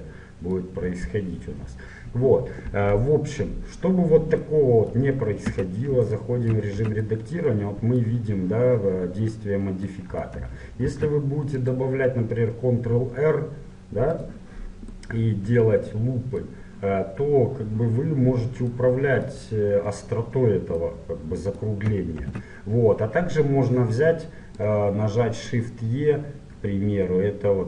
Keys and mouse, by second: 0.8 click, 5.5 Tab, 6.8 z, 10.9 ctrl+r, 15.0-17.0 middle drag, 18.8 middle click, 22.3 ctrl+z, 24.6-26.7 drag.